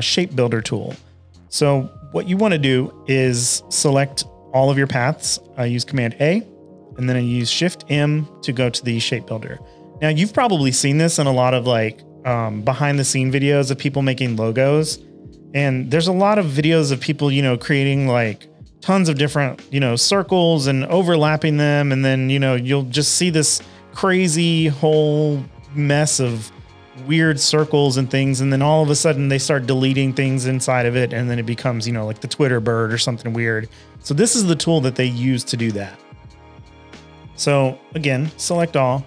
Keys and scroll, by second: 4.1 super+a, 7.3 m, 15.1 shift+super+a, 15.3 v, 15.4 space, 15.9 space, 16.3 i, 18.0 shift+super+a, 18.2 v, 19.0 i, 28.5 shift+super+a, 30.1 shift+m, 30.8 v, 32.0 shift+m, 34.4 v, 35.6-36.5 typing, 37.7 super+a, 38.5 m.